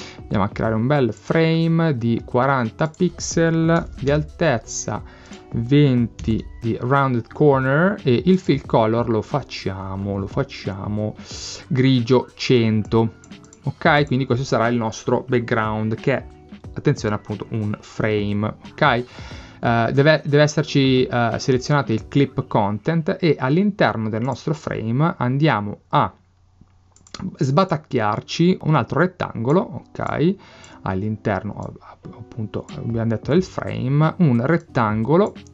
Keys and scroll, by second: 3.6-4.5 typing, 6.0-6.8 typing.